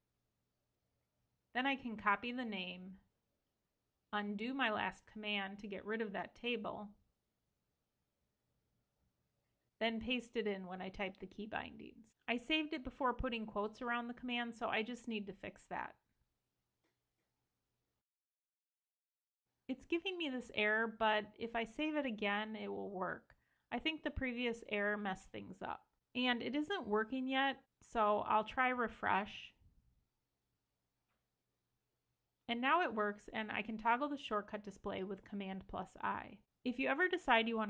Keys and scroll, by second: 1.4 super+c, 3.8 super+z, 5.4 shift+super+Return, 10.4 super+v, 11.7 super+s, 17.6 super+s, 21.8 super+s, 27.2 super+i, 27.9 super+i, 29.4 super+r, 33.2 super+i, 34.1 super+i.